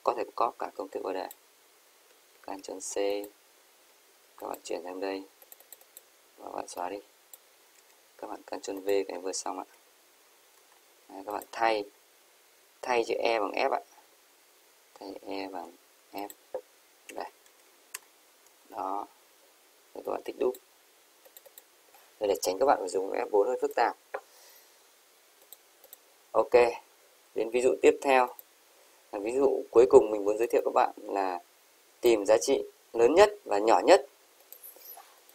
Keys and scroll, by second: 2.4 ctrl+c, 9.6 ctrl+v, 17.7-18.9 typing, 18.0 Return.